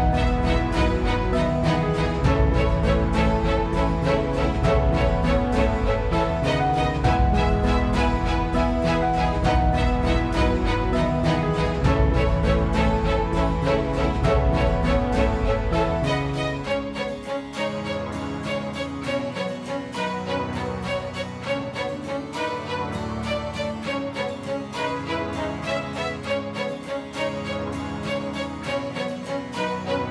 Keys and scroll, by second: 26.3 F9, 27.5 ctrl+r.